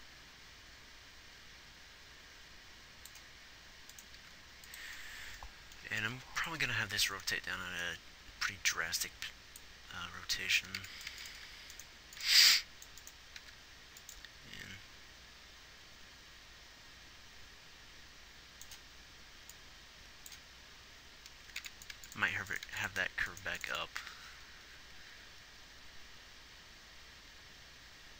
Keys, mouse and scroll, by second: 4.5 g, 6.4 ctrl+s, 12.4 x, 12.8 click, 13.8 g, 23.0 x.